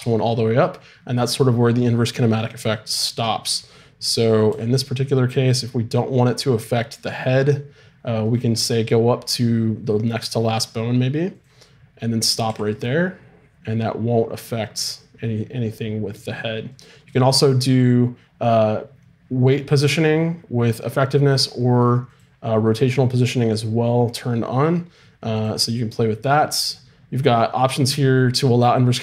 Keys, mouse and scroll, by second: 4.5 g, 11.3-12.8 drag, 12.5 g, 25.3-28.4 drag.